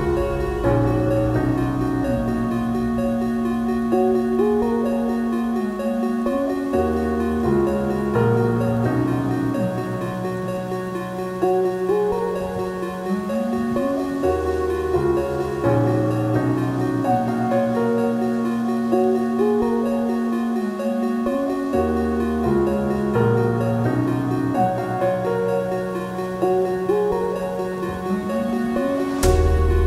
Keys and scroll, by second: 27.8 ctrl+z, 28.2 ctrl+z, 29.0 ctrl+z, 29.3 ctrl+z.